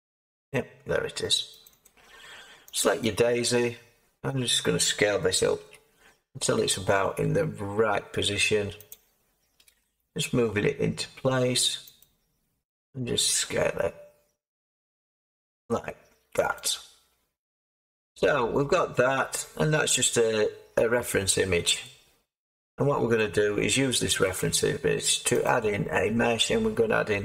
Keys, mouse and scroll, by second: 0.5-1.5 scroll down 2, 1.5 scroll down 1, 1.6-3.8 drag, 3.8-5.6 scroll down 2, 5.6-7.1 scroll down 1, 5.6 s, 7.1-8.8 scroll down 1, 8.8 click, 9.6 g, 11.9 click, 13.4 s, 16.5 click, 17.8 Tab, 18.3 scroll, 18.8 scroll up 1, 18.9-25.4 middle drag, 25.4-27.2 drag.